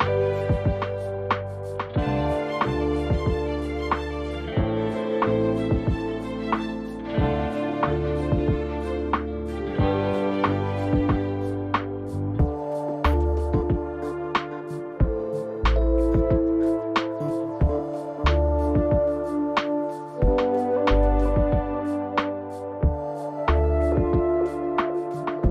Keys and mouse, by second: 6.4 `, 8.2 click, 15.7 shift+a.